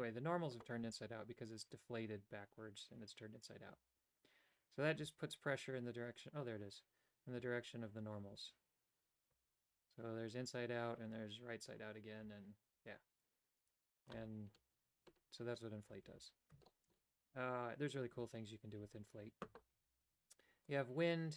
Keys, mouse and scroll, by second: 1.7-14.2 drag, 16.7 shift+middle click, 20.7-21.3 drag.